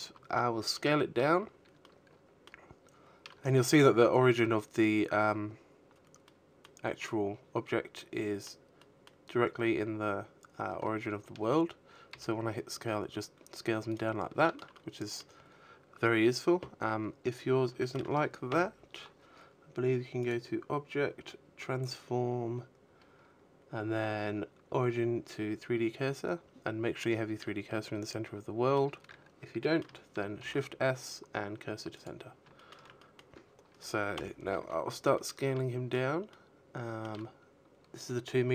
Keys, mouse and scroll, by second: 3.5 middle click, 5.3 middle click, 6.1 middle click, 9.4 s, 11.2 right click, 11.7 shift+middle click, 12.0 middle click, 15.1 shift+middle click, 15.8 KP_1, 17.5 click, 24.8 middle click, 26.8 middle click, 27.7 shift+s, 29.8 shift+middle click, 30.2 middle click, 31.4 KP_1, 32.0 scroll up 3, 32.4 shift+middle click, 34.0 shift+middle click, 36.2 s.